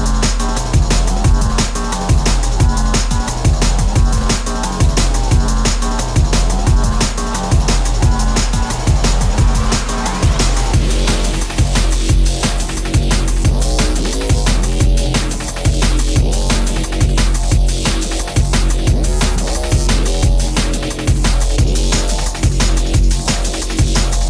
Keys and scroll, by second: 4.9-6.0 typing, 7.5 Return, 10.6 space, 14.5 ctrl+g, 16.1 p, 20.4 shift+space, 22.4 s.